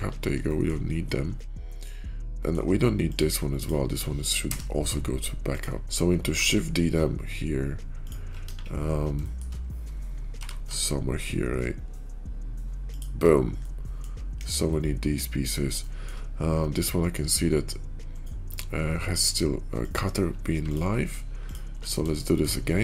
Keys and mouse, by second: 0.3 shift+middle click, 1.2-2.5 middle drag, 4.3 m, 6.0 shift+KP_5, 6.3 shift+d, 8.3 KP_5, 9.1 shift+middle drag, 10.3 g, 13.5 middle click, 14.3 KP_5, 14.5-15.0 middle drag, 15.7 shift+middle drag, 19.7 click, 20.4 x, 21.4 click, 21.6 x, 22.1 shift+click.